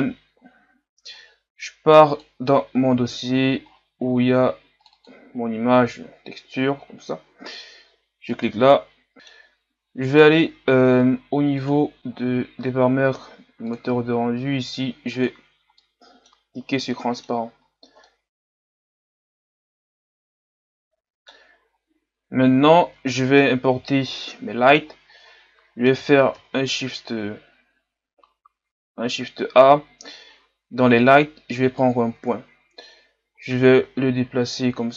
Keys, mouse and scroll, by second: 5.0-9.1 drag, 9.1-15.2 middle drag, 15.2 click, 15.8 middle click, 16.4-16.9 scroll up 2, 16.9 middle click, 17.6-18.1 scroll up 1, 18.1-21.0 middle drag, 21.7-22.1 scroll down 2, 23.4 KP_3, 24.9-25.6 scroll down 5, 25.6-26.7 scroll up 3, 26.7-28.1 scroll up 1, 28.1-29.4 scroll up 1, 29.4-30.7 scroll up 1, 30.7-32.0 scroll up 1, 33.9 g.